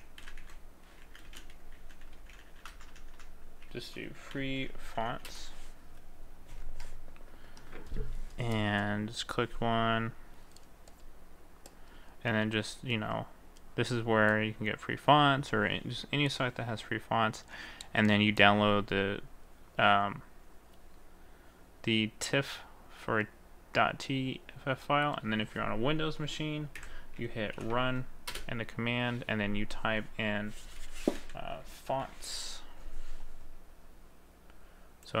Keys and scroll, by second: 1.3 space, 2.2 m, 2.7 BackSpace.